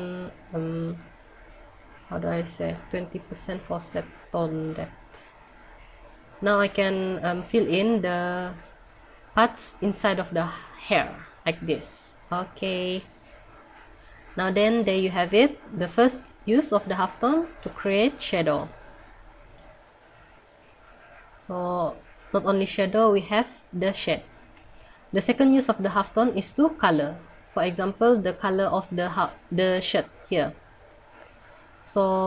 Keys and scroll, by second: 19.3 scroll up 1.